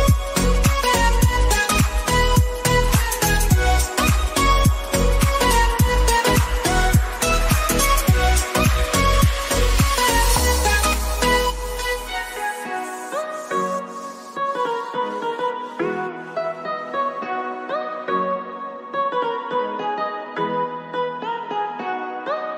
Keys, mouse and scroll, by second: 2.1-3.8 drag, 3.6-4.4 typing, 7.6 3, 9.2 Return, 9.8 click, 11.5 ctrl+a, 13.4-22.5 typing.